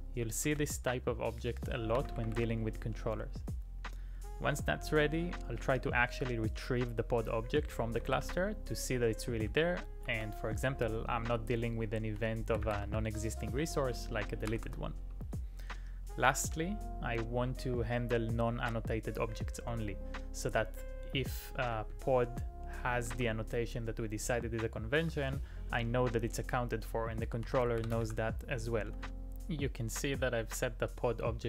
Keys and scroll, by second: 0.5 typing, 8.2 alt+i, 9.5 k, 10.1 j, 12.0-13.4 typing, 14.5 z, 14.7 z, 16.4 j, 23.1 j, 25.0 j, 27.2-29.5 typing.